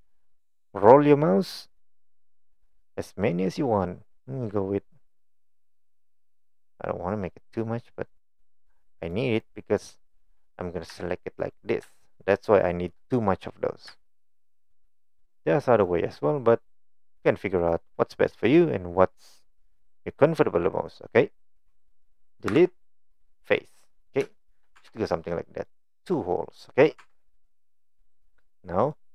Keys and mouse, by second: 10.9 3, 11.4 click, 12.6 shift+click, 16.8 shift+click, 22.5 Delete, 24.3 shift+middle click, 24.8 Tab, 25.0-25.7 middle drag, 26.6 middle drag, 27.0 Tab, 27.3 middle click, 27.8 middle click, 28.9 middle click.